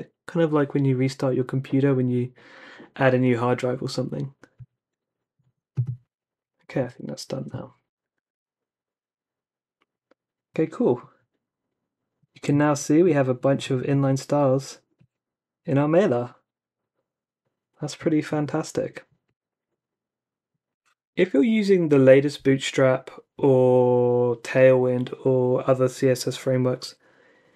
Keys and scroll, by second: 8.2 super+r.